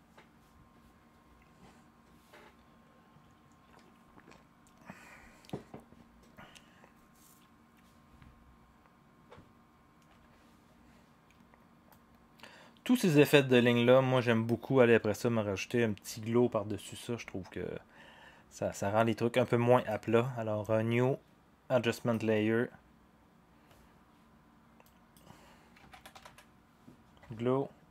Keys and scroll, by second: 10.1 0, 25.6-26.7 typing.